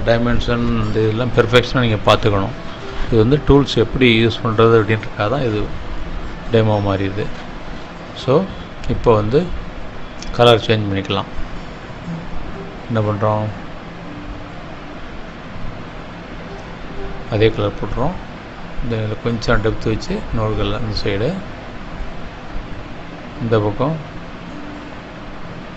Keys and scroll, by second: 9.5 ctrl+-, 12.0 space.